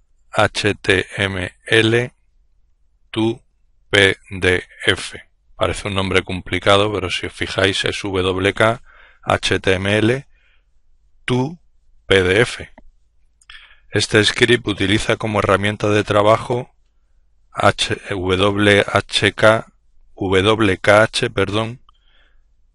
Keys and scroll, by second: 0.0-1.4 typing, 2.6-4.7 typing.